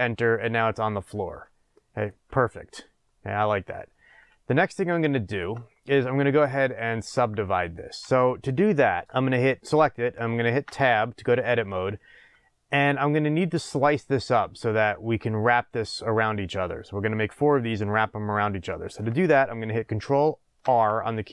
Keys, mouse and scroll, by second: 2.4-9.0 middle drag, 5.6-6.2 scroll up 2, 6.2-6.6 scroll down 2, 9.0 click, 9.6 click, 10.6 Tab, 20.6 ctrl+r.